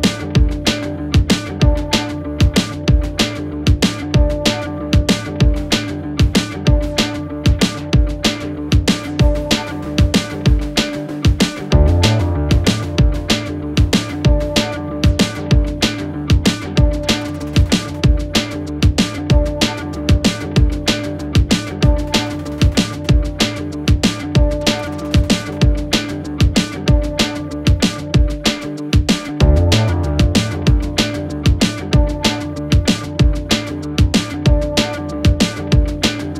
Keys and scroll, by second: 1.6 5, 7.6 4, 14.7 3, 16.1 4.